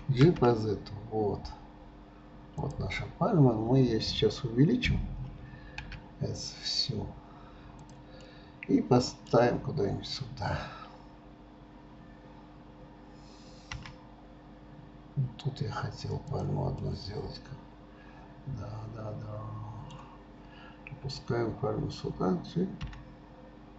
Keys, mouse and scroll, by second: 8.3-11.3 middle drag, 16.8-19.9 middle drag.